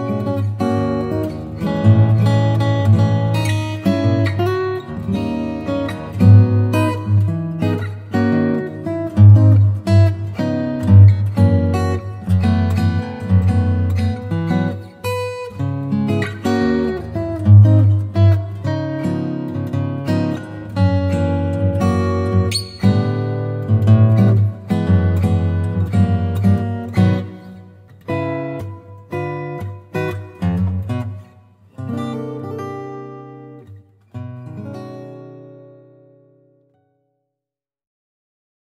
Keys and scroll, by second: 13.2 b, 14.8 3, 15.4 ], 18.2 x, 20.3 0, 23.1 [, 28.7 super+z, 34.5 i, 36.3 v.